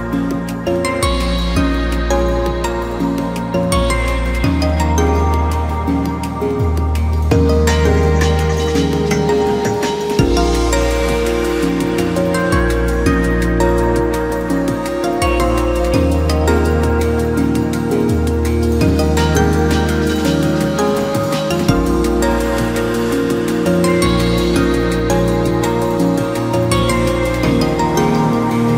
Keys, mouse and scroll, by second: 0.1 ctrl+r, 1.3 scroll up 1, 1.6 s, 5.6 click, 6.2 c, 8.5 c, 10.7 click, 11.1 s, 13.6-14.1 scroll down 1, 14.2 ctrl+r, 16.9 scroll down 2, 17.1 middle drag, 17.3-17.7 scroll up 1, 17.7 Tab, 19.5 middle click, 19.8 scroll down 2, 19.9-21.3 middle drag, 21.3 ctrl+2, 21.9 KP_1, 22.4 scroll up 2, 22.6 scroll down 1, 22.8-23.2 middle drag, 23.2 Tab, 23.5 middle click, 24.4-24.8 scroll up 1, 24.8-26.1 middle drag, 26.1 KP_1, 26.4 Tab, 27.1 2, 27.4 click, 27.5 click, 28.2-28.7 right drag.